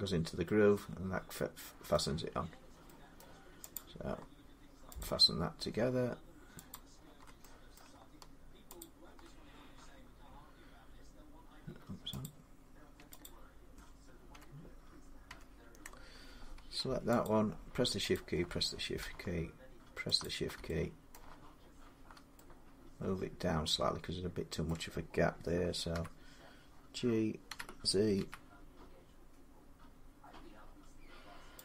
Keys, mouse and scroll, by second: 0.5 scroll up 1, 0.7 scroll down 1, 1.2 middle click, 1.8 middle click, 3.0 middle click, 3.6 click, 4.8 click, 6.5 click, 7.6 middle click, 8.6 click, 12.1 click, 12.8 Tab, 13.1 click, 13.3-13.6 Tab, 14.2 Tab, 15.1 Tab, 17.1 click, 18.0 shift+click, 18.8 middle click, 20.1 shift+click, 21.0 middle click, 24.5 middle click, 25.8 1, 27.3-28.0 typing, 28.0-29.6 middle drag, 31.4 g, 31.5 click.